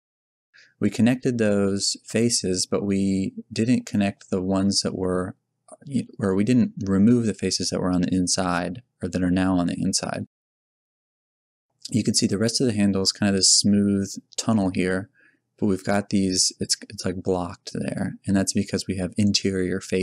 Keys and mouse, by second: 10.5 z, 11.7 z, 12.0 z, 18.4 middle click, 19.7 middle click.